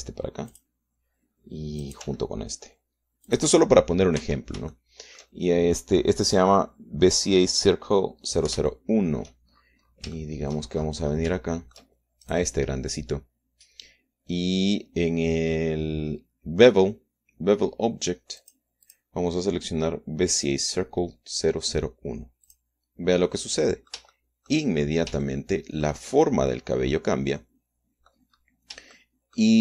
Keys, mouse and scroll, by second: 1.1 g, 1.8 click, 3.1 click, 3.3 g, 4.6 click, 5.1 scroll down 2, 5.5 Tab, 6.1 shift+click, 6.7-7.9 shift+middle drag, 10.0 shift+click, 10.7 shift+middle click, 10.9-11.5 shift+scroll down 3, 11.5 shift+middle click, 12.1-12.7 shift+scroll up 1, 12.7 shift+middle click, 13.6 shift+click, 19.7 click, 20.2 click, 23.8 click, 24.6-27.3 middle drag, 28.2-28.7 scroll down 2, 28.7 middle click.